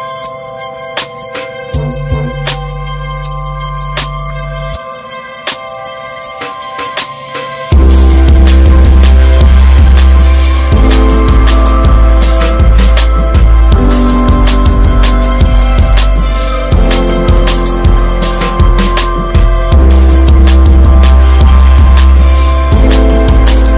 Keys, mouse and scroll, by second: 0.0 e, 0.3 alt+w, 1.3 alt+w, 2.8 3, 3.9 alt+w, 7.0 middle click, 7.6 alt+s, 9.6 Tab, 9.8 drag, 10.0-10.4 scroll down 10, 10.4 middle click, 10.6 scroll up 2, 10.8-12.7 shift+middle drag, 12.7 `, 13.6 Tab, 13.8 click, 14.5 shift+middle click, 14.8 shift+scroll up 2, 15.1 shift+middle click, 16.0 shift+middle click, 16.5 scroll down 2, 16.8 shift+middle click, 17.4-18.0 scroll up 2, 17.8 shift+middle click, 18.6 click, 19.0 ctrl+z, 19.5 click, 20.3 s, 22.0-22.6 scroll down 2, 22.6 click.